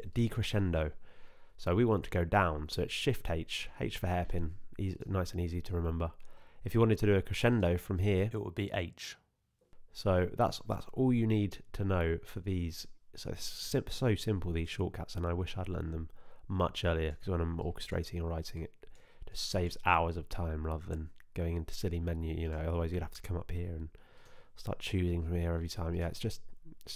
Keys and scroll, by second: 3.0 shift+h, 8.8 h.